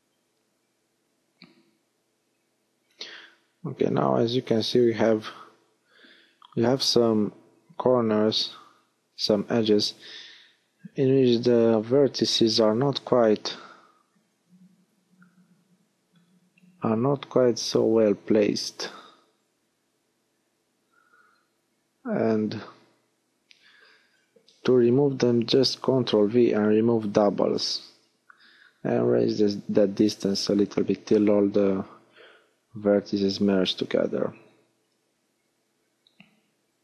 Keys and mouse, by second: 1.9-4.2 drag, 4.2 middle click, 4.8 click, 5.2 a, 6.1 click, 13.6 x, 16.6 a, 19.4 ctrl+v, 24.1-26.1 drag.